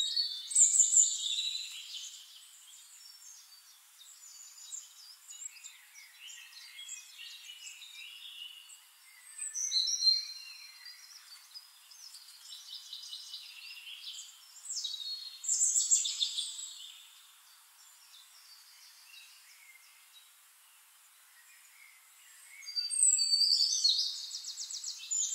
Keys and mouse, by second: 0.1-1.1 drag, 2.0 drag, 2.3 click, 2.8 click, 3.4 click, 3.9 click, 6.0 click, 6.6 middle click, 8.4-18.4 drag, 19.2 click, 20.2 middle click, 21.0 click, 22.0 click, 22.8 click, 23.2 click, 24.6 click, 25.1 click.